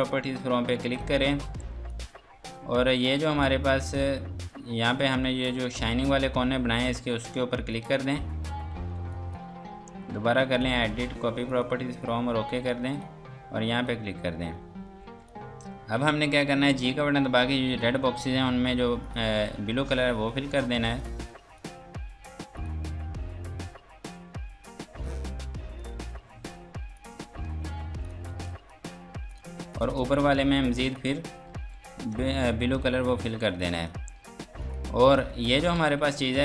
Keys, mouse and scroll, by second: 0.0 click, 3.2-5.4 scroll up 1, 7.8 click, 8.9 F2, 9.1 click, 14.3 scroll down 1, 15.0 F2, 15.3 click, 16.7 g, 17.7 click, 22.6 click, 23.5 scroll down 1, 24.6 click, 27.5 ctrl+space, 28.0 click, 28.3 F2, 28.5 click, 31.8 F3, 32.4 click, 33.1 Escape, 33.3 F2, 33.6 click, 34.1 Escape, 34.6 click.